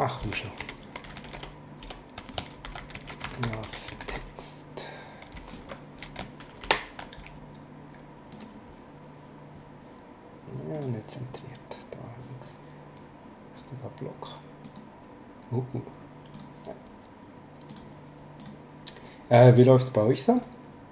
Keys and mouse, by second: 0.6 ctrl+z, 1.3 shift+Return, 2.4-4.6 typing, 6.6 ctrl+shift+Left, 8.3 click, 10.7 click, 14.6 click, 16.3 click, 17.7 click.